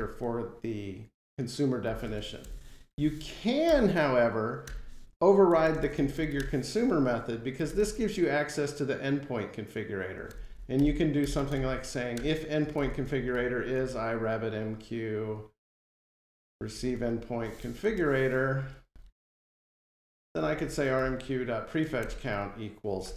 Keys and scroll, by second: 3.5 Return, 5.7 Delete, 12.0 Return, 17.8 Return.